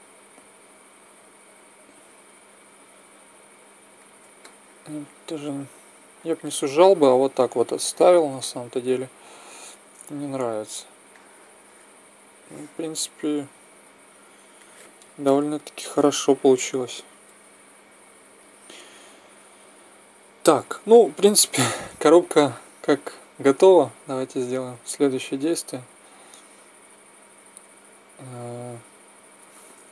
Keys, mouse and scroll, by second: 4.4-6.8 middle drag, 7.8-9.6 drag, 9.6 z, 9.8 click, 10.6 Tab, 11.1 drag, 20.9-21.3 middle drag, 21.3-22.7 drag, 22.7 middle click, 23.5 ctrl+a, 27.3 z, 27.7 z.